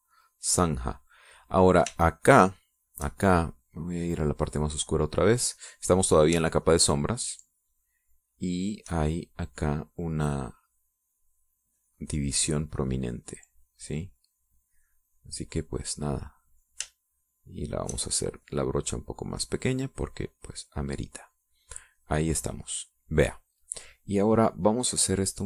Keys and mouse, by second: 3.2-4.3 shift+drag, 5.2 click, 7.9-10.1 shift+drag, 12.3 click, 12.8-17.1 drag, 18.3 shift+click, 19.4-22.5 shift+drag, 23.2 middle click, 23.9 middle click.